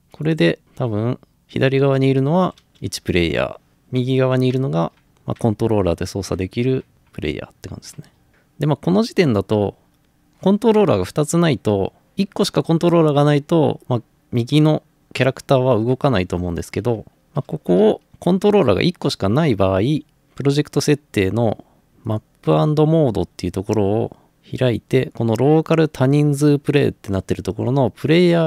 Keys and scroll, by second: 0.9-3.4 typing, 5.0 typing, 17.5 Escape.